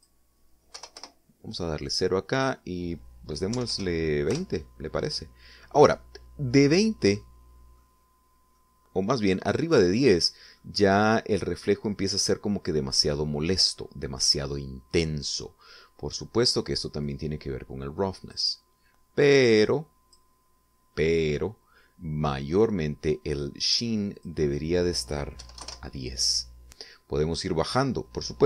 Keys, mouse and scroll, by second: 1.0 click, 1.8 0, 2.0 Return, 3.4 click, 4.3-5.2 typing, 5.3 Return, 8.2 middle click, 9.2 scroll down 2, 9.6 middle click, 11.6 middle click, 12.7-13.2 scroll up 4, 18.1-19.6 drag, 20.5 click, 25.2 click, 26.2-27.1 typing.